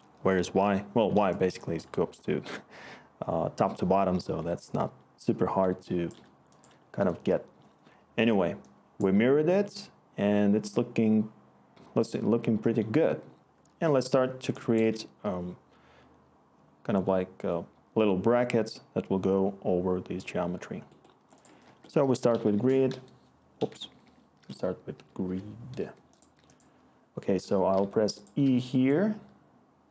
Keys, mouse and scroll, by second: 21.6 Tab, 21.8-25.2 typing, 27.7-28.7 typing.